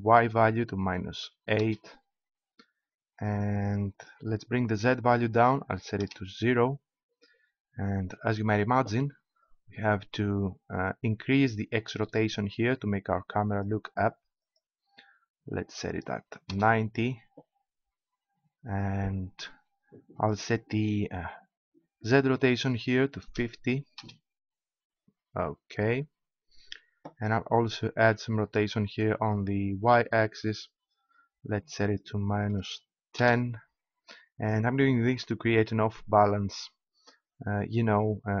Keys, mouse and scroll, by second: 4.6-6.0 drag, 9.4-11.8 drag, 14.4-16.1 drag, 16.1 middle click, 20.1-22.0 drag, 22.0-23.3 middle drag, 26.0-27.6 middle drag, 27.6-29.5 drag, 34.0-36.6 middle drag, 37.7-38.4 middle drag.